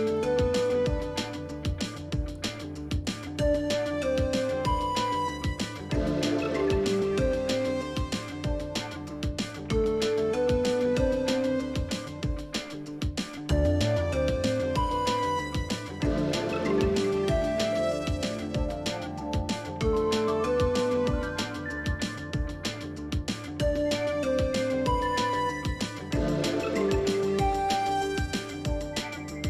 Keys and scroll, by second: 0.2 Down, 2.4 Left, 2.5 Left, 2.6 Left, 2.8-3.4 Left, 3.4 Right, 10.2 super+q.